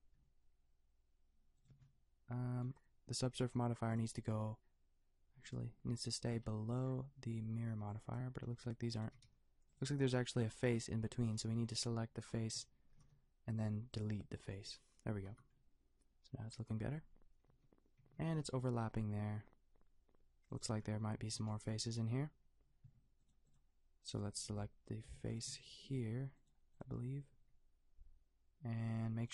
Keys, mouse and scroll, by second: 0.2 g, 1.7 a, 6.2-7.7 middle drag, 7.7 b, 8.5 g, 9.1 g, 10.3 click, 13.0 Delete, 15.3 Tab, 16.8 Tab, 17.5 g, 18.0 a, 18.2 g, 20.7 a, 23.2-28.6 drag, 25.1 a, 27.4 g.